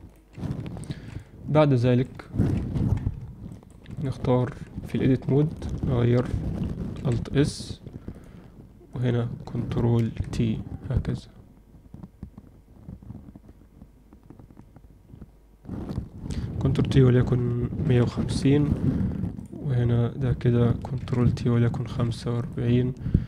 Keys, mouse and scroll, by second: 0.0-0.5 drag, 0.7 ctrl+middle click, 1.5-2.0 alt+middle drag, 2.2 ctrl+alt+middle click, 2.8 KP_1, 3.4 ctrl+alt+middle drag, 4.4 Tab, 4.9 z, 5.4 click, 6.9 alt+s, 9.9 ctrl+t, 19.3 click, 20.9 ctrl+t.